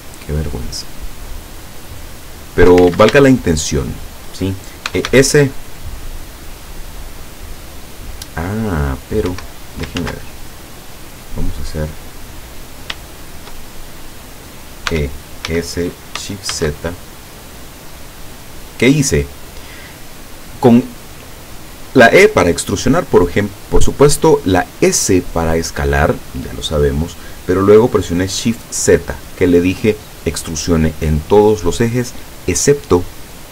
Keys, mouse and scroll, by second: 0.5 shift+right click, 1.6 shift+right click, 2.2 shift+right click, 2.9 ctrl+shift+z, 3.3 ctrl+shift+right click, 3.9 shift+right click, 4.7-5.6 typing, 9.3 Escape, 10.0 ctrl+z, 10.4-10.7 ctrl+scroll down 3, 10.8-12.2 drag, 12.4 scroll up 2, 13.2 shift+click, 13.8 shift+middle click, 14.9 e, 15.5 s, 16.6 shift+z, 19.1 click, 19.7 middle click, 20.7-21.1 scroll up 2.